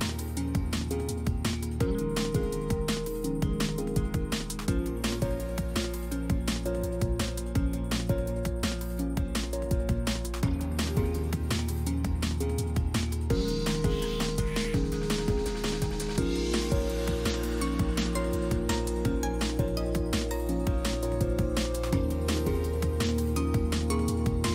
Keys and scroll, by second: 1.3 s, 2.1 c, 3.3 s, 15.2 s, 20.3 s.